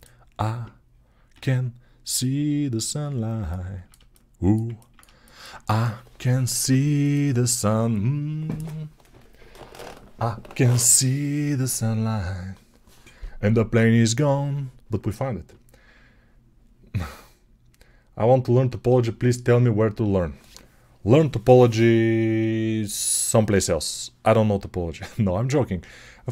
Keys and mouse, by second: 1.1 `, 5.1-26.3 alt+shift+drag.